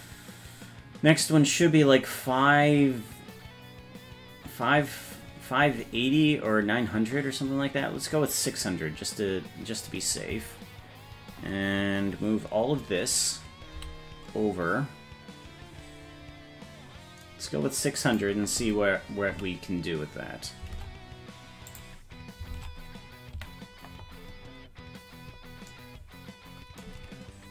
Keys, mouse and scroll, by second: 20.8 ctrl+Tab, 21.7 click, 22.5 ctrl+Tab, 23.4 a.